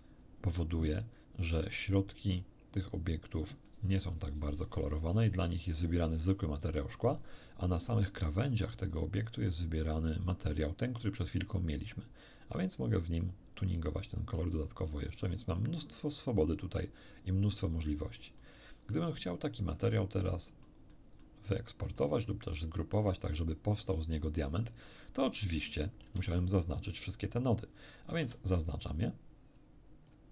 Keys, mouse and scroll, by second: 3.7-5.7 middle drag, 12.8 click, 13.7-15.3 drag, 17.4-18.1 scroll down 2, 18.4 middle click, 20.2 middle click, 21.2 middle click, 21.9 middle click, 22.5 middle click, 23.1 click, 24.6 scroll down 2, 24.9 click, 26.1 a, 26.4 click, 28.2 b, 28.7-30.3 drag.